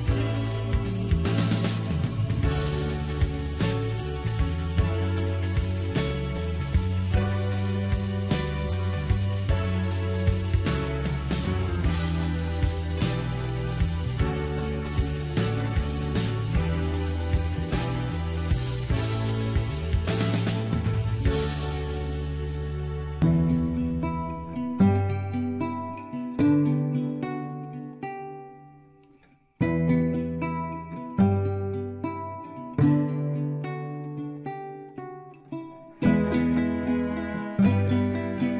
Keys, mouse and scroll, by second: 0.0-0.3 scroll down 1, 0.3 middle click, 1.3-1.8 scroll up 2, 1.8 click, 2.1 middle click, 3.1 shift+click, 3.4 shift+click, 3.7 shift+click, 3.9 shift+click, 4.1 shift+click, 4.3 shift+click, 4.4 shift+click, 4.7 middle click, 5.1 shift+click, 5.4 shift+click, 5.6 middle click, 6.1 shift+click, 6.3 shift+click, 6.6 shift+click, 6.7 middle click, 7.5 shift+click, 7.7 shift+click, 7.9 shift+click, 8.1 middle click, 8.6 shift+click, 8.8 middle click, 9.6 KP_3, 10.3 e, 12.4 s, 14.1 click, 15.0 scroll down 2, 15.3 shift+middle click, 15.6 scroll up 2, 15.9 shift+middle click, 16.1 Tab, 16.4 Tab, 16.6 scroll up 1, 16.8 shift+middle click, 17.3 click, 18.2-19.8 shift+middle drag, 19.8 click, 21.2 f, 21.4 click, 22.0-24.6 shift+middle drag, 24.6-25.0 scroll down 1, 25.0-27.7 middle drag, 27.7 shift+click, 29.4 shift+click, 30.6-32.3 right drag, 32.3-33.3 middle drag, 33.3 click, 34.9 g, 37.8 shift+click.